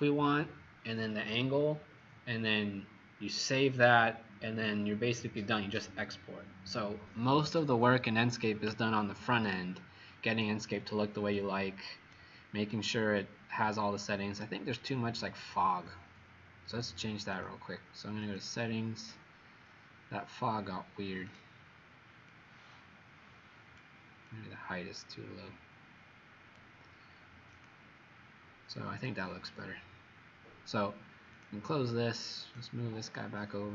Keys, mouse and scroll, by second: 12.6 right click, 14.8-15.5 scroll up 5, 17.4 click.